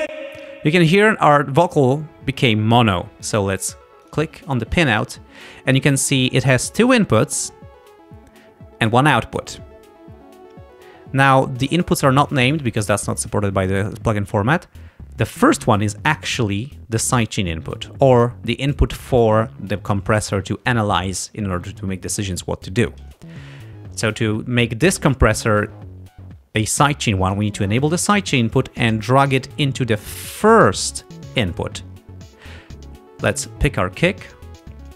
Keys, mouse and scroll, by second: 0.1 space, 4.1 click, 27.7 click, 28.9-30.8 drag, 33.3 click, 34.6 click.